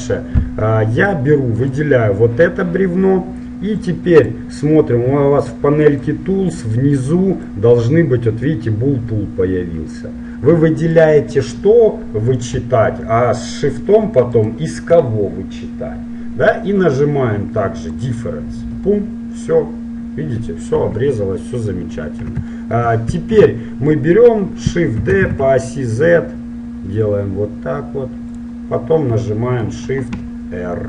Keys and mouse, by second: 0.5-3.1 middle drag, 1.6-3.7 right drag, 3.9-5.8 drag, 6.1-8.0 drag, 11.1-12.9 right drag, 14.4-16.3 right drag, 18.0-19.2 drag, 19.2 middle click, 19.6 click, 21.1 KP_1, 23.4 2, 25.1 shift+d, 28.8 middle click.